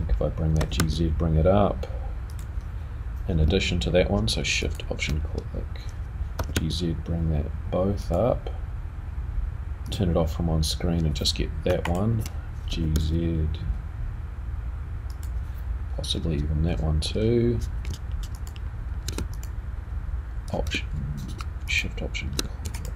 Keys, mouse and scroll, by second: 0.6 g, 4.6 alt+shift+click, 6.3 g, 9.8 click, 11.8 alt+click, 12.7 g, 18.3 ctrl+shift+click, 19.3 click, 21.7 alt+shift+click, 22.7 alt+click.